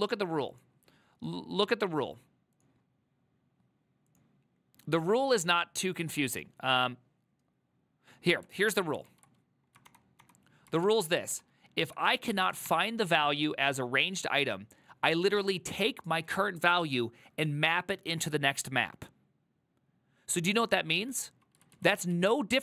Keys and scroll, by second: 8.7 alt+{, 9.2 alt+{, 9.9 ctrl+d, 10.3 ctrl+d, 10.8 ctrl+u, 11.9-13.2 typing, 21.8 ctrl+u, 22.2 ctrl+u.